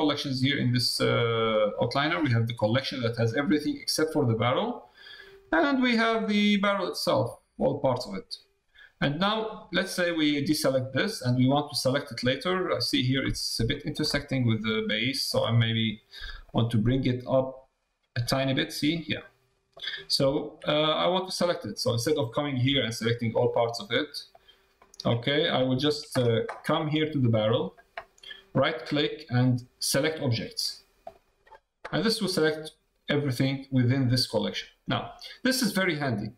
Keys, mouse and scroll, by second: 6.3 click, 9.1 click, 9.9 click, 10.5 middle click, 11.6 middle click, 12.3 middle click, 13.7 shift+middle click, 14.1 middle click, 14.9 shift+middle click, 16.4-18.2 middle drag, 18.9 middle click, 20.3 shift+middle click, 20.9 middle click, 23.0 shift+click, 24.7 shift+click, 30.3 right click, 32.0 middle click, 33.4 click, 35.9 middle click.